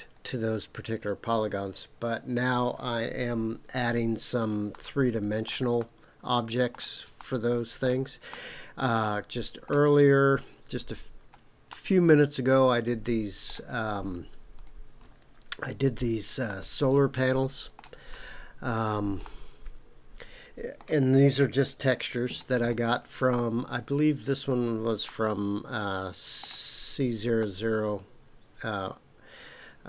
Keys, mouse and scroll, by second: 4.7-5.5 shift+middle drag, 5.8-6.8 middle drag, 7.2-7.8 shift+middle drag, 8.3-9.7 middle drag, 10.0-10.9 scroll up 4, 11.0-11.6 scroll down 1, 11.7-13.5 middle drag, 14.5 click, 15.7 KP_Decimal, 16.4-17.1 middle drag, 18.6 click, 19.2-20.7 middle drag, 21.4-22.1 scroll up 2, 22.1-22.6 scroll up 2, 25.0-26.4 middle drag, 27.4-29.8 middle drag.